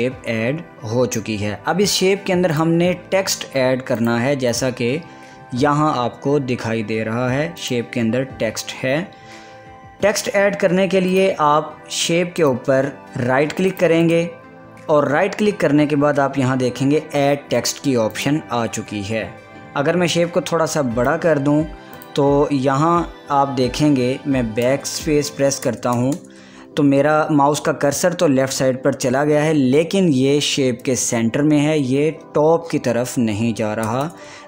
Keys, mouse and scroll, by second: 4.7 click, 7.7 click, 11.2 click, 14.1 right click, 18.2 click, 20.2-22.1 drag.